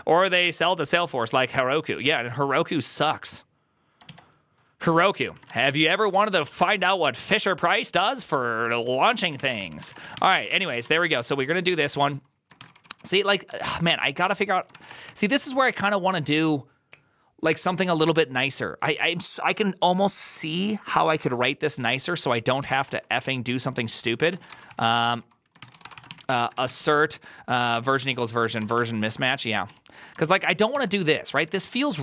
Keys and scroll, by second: 4.7-6.4 typing, 6.2 ctrl+c, 6.4 Return, 8.3-15.8 typing, 22.4-27.1 typing, 27.6 Tab, 27.9 ctrl+c, 28.4 ctrl+c, 28.5 ctrl+:, 28.5-32.0 typing, 28.6 Return.